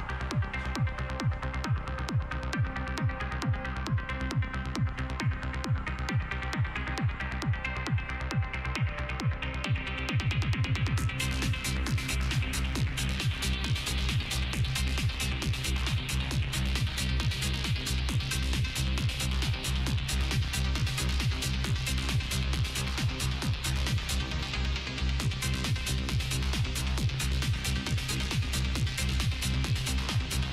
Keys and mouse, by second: 0.0 right click, 0.4 Tab, 0.6 middle click, 0.8 right click, 1.1 g, 1.7 Tab, 2.2 Tab, 2.8 g, 3.2 Tab, 3.6 Tab, 4.3 g, 6.0 z, 6.5 z, 6.9 KP_7, 7.2 Tab, 7.5 Tab, 9.8 KP_7, 10.1 Tab, 10.4 Tab, 12.3 Tab, 12.8 a, 12.9 a, 14.7 click, 14.9 right click, 16.1-17.5 right drag, 16.7 s, 17.9 g, 21.4 s, 22.7 g, 24.0 Tab, 24.2 Tab, 25.6 click, 26.9 s, 28.1 r, 28.9 g, 30.1 r.